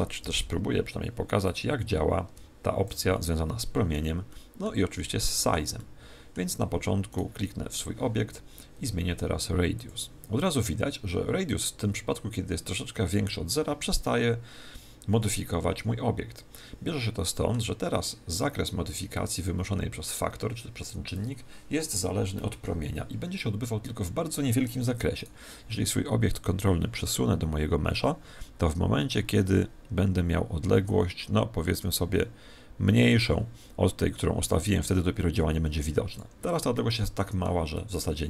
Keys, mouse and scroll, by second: 0.2 alt+g, 0.7 alt+g, 1.4 click, 3.0-8.5 middle drag, 7.0 right click, 9.7 click, 14.0-15.8 middle drag, 25.1 right click, 26.3 click, 36.7-38.2 middle drag.